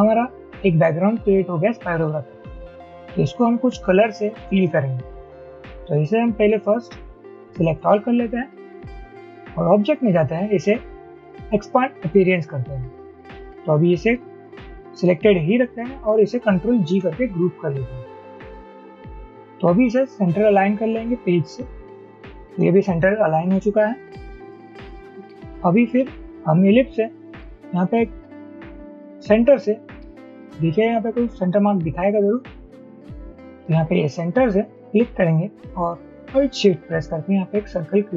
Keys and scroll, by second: 16.9 ctrl+g, 26.3 ctrl+z, 32.5 ctrl+z.